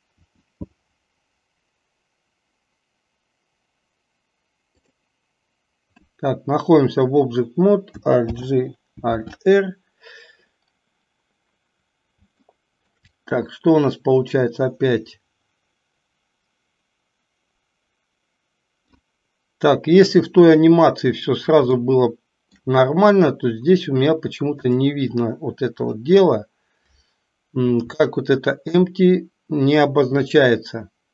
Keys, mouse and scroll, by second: 0.1 r, 8.2 alt+g, 9.2 alt+r, 12.6 shift+middle click, 14.3-19.0 drag, 21.8-22.6 shift+middle drag, 28.1-28.8 shift+middle drag.